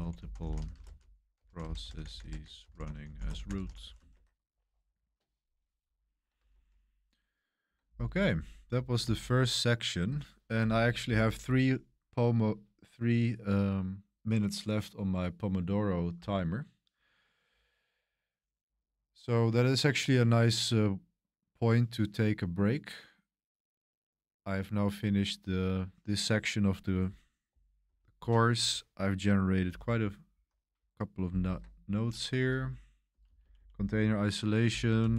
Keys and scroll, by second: 0.0-4.1 typing, 4.1 Escape, 6.5 super+1, 9.0 super+3, 27.8 super+1, 29.6 super+7, 29.6 super+1, 31.2 super+y, 32.3 Return, 33.2 Page_Up, 33.4 Page_Up, 33.5 Page_Up, 35.0 Down.